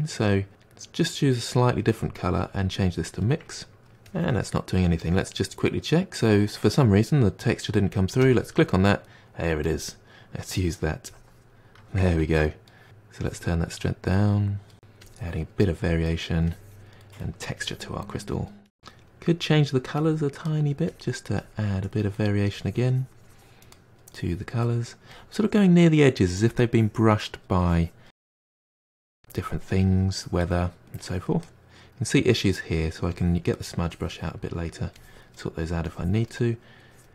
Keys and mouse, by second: 0.5 click, 2.5-3.6 drag, 3.6-4.0 ctrl+middle drag, 4.0-5.0 drag, 5.0-8.0 middle drag, 8.2 click, 9.7 click, 10.6-11.1 middle drag, 11.1-12.2 drag, 12.2 ctrl+z, 12.7-13.2 middle drag, 13.2-15.1 drag, 15.1 middle drag, 15.3 drag, 15.5 middle click, 15.6 click, 16.0 middle click, 16.1 drag, 16.3 middle drag, 16.6 drag, 16.8 middle click, 17.0 click, 17.1 middle drag, 17.3 drag, 17.5 middle drag, 17.6-18.2 drag, 18.2 middle drag, 18.3 drag, 18.5 middle drag, 18.7-20.4 drag, 20.4-20.9 middle drag, 20.9-22.2 drag, 22.2-22.6 middle drag, 22.6-23.7 drag, 23.7-24.2 middle drag, 24.2-24.6 drag, 24.6-25.1 middle drag, 25.1-26.4 drag, 26.4-26.8 middle drag, 26.8-27.2 drag, 27.2-27.6 middle drag, 27.6-28.2 drag, 28.2 middle drag, 28.4 drag, 28.7-29.1 middle drag, 29.1-29.8 drag, 29.8-30.2 middle drag, 30.2-30.5 drag, 30.5-31.0 middle drag, 31.0-31.4 drag, 31.4-33.1 middle drag, 33.1-33.5 drag, 33.5-33.9 middle drag, 33.9-34.5 drag, 34.5-35.0 middle drag, 35.0-35.4 drag, 35.4-35.8 middle drag, 35.8-36.4 drag, 36.4-36.9 middle drag, 36.9 drag.